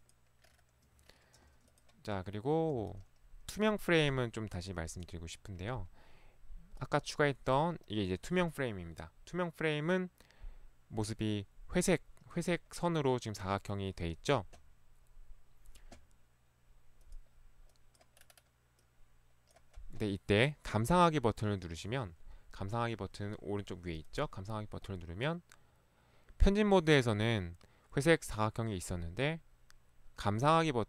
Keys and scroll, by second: 5.0 Delete, 21.9 ctrl+1, 23.0 ctrl+1, 23.0 Escape.